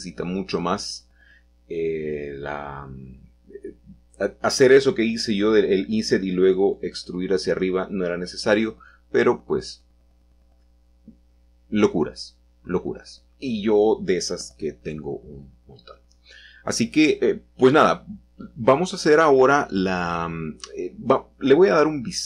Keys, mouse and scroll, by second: 1.2 click, 2.6 click, 3.4 Tab, 3.9-6.2 scroll down 1, 6.2 middle click, 6.5-7.6 scroll down 2, 7.6-8.3 scroll down 1, 9.1 shift+middle drag, 9.8-10.7 shift+middle drag, 10.0-10.7 scroll up 1, 11.4-12.3 scroll down 1, 12.3 Tab, 13.1 click, 14.4 shift+click, 15.3 shift+click, 16.6 shift+click, 19.1 shift+click, 20.2 shift+click, 21.3-22.2 shift+middle drag.